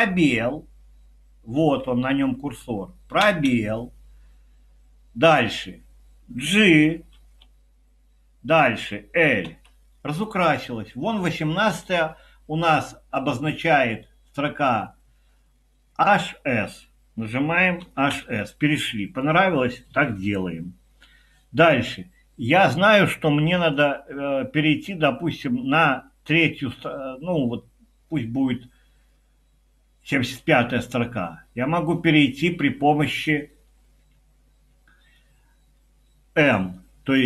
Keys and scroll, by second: 1.6 Down, 3.2 space, 7.2 j, 9.2-9.9 typing, 17.6-18.6 typing.